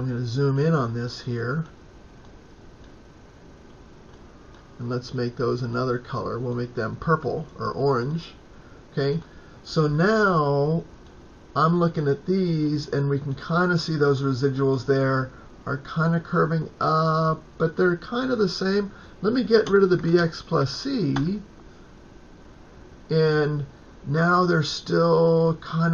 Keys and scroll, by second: 19.5-21.0 typing.